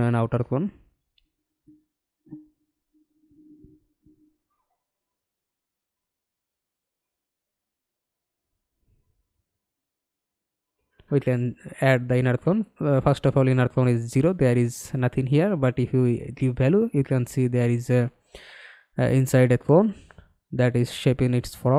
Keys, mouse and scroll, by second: 0.9-1.6 scroll up 2, 1.6 scroll down 1, 3.4 middle click, 6.9 middle click, 13.9-16.7 scroll down 1.